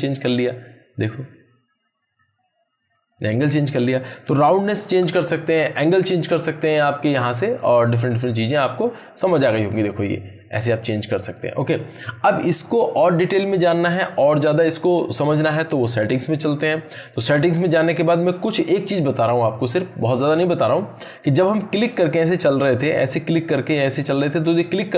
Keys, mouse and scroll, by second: 4.5 ctrl+z, 7.0-9.2 drag, 19.6 click, 21.8 click.